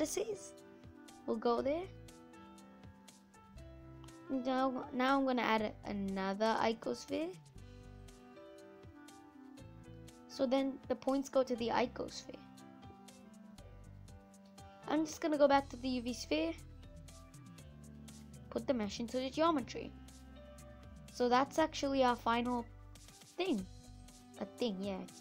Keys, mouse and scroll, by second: 0.0-0.7 scroll down 1, 0.7-1.4 scroll down 1, 2.1-3.2 scroll up 6, 3.2 Delete, 6.3 shift+a, 9.0 click, 9.4 middle click, 9.7-10.2 scroll down 5, 10.2-11.2 middle drag, 11.2-12.5 scroll down 1, 12.5 scroll down 1, 12.6 Delete, 15.9 shift+a, 18.7 click, 19.1 scroll up 1, 19.2 middle click, 19.5 scroll down 1, 19.7-20.1 scroll up 2, 20.1 middle click, 20.7 scroll up 3, 20.9-25.2 middle drag.